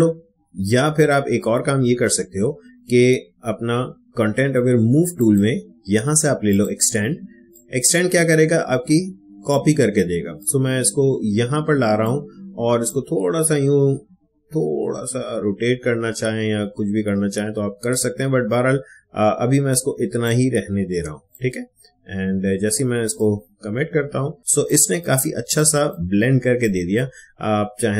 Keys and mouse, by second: 5.1-23.0 drag, 24.4 ctrl+d, 24.4 space, 24.6 click, 25.2 space, 25.5 click, 26.0 space, 26.6-27.9 drag.